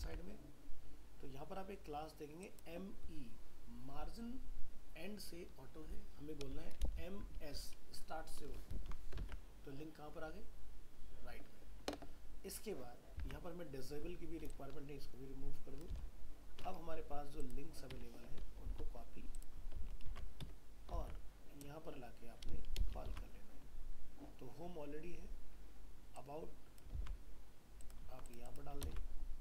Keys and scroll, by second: 0.0 alt+Tab, 8.7 ctrl+s, 9.2 alt+Tab, 13.2 alt+Tab, 19.8 ctrl+a, 20.1 ctrl+c, 21.0 alt+Tab, 23.1 ctrl+v, 27.0 ctrl+x.